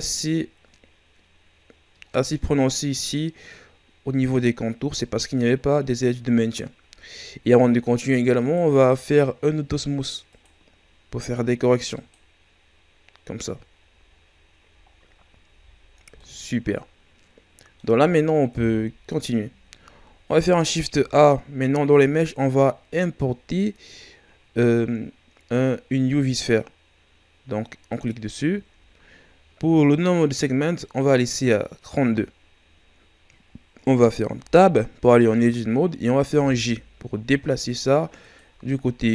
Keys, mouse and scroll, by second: 1.7-4.5 scroll up 2, 6.0-6.9 scroll down 2, 6.9 shift+scroll down 3, 7.4 scroll up 2, 8.3 right click, 10.3-14.1 drag, 14.1 scroll down 2, 14.9-15.5 shift+scroll up 4, 15.5 a, 16.0 scroll down 2, 16.1-18.5 middle drag, 18.5 KP_1, 20.9 shift+a, 34.3 Tab, 36.3 g, 38.7 ctrl+scroll up 4.